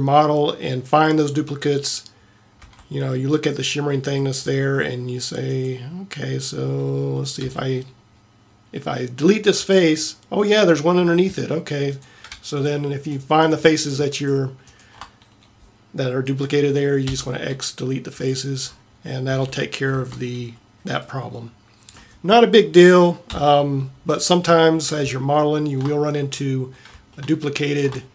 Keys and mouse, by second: 2.7 a, 7.5 x, 17.1 x, 19.4 a, 19.9 Tab, 23.4 KP_7.